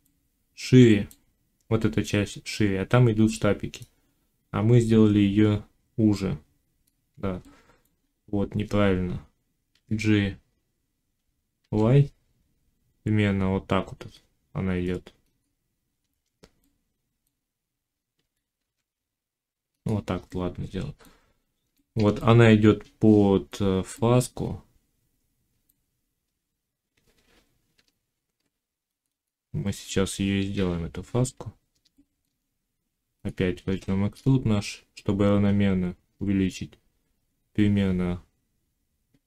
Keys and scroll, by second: 9.6 g, 11.5 y, 18.1 g, 27.6 Tab.